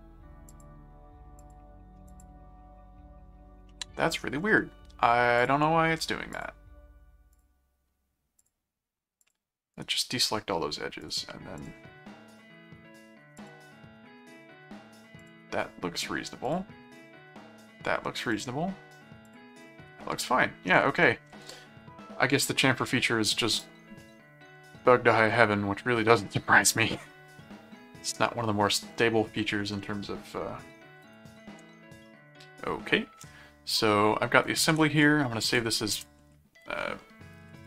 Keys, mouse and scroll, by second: 0.5 click, 1.4 click, 2.1 click, 3.7 middle click, 5.4 click, 6.3 click, 7.3 click, 8.4 click, 9.2 click, 9.8 right click, 11.0 right click, 11.6 click, 13.4 click, 15.2 click, 16.5 click, 18.3 click, 19.3 click, 19.8 right click, 21.0 middle click, 23.5 click, 24.0 middle click, 25.2-26.3 middle drag, 27.0-29.3 middle drag, 29.8 middle click, 31.0 click, 31.6 ctrl+Tab, 34.8 ctrl+s, 35.9 Return, 37.2-37.6 typing.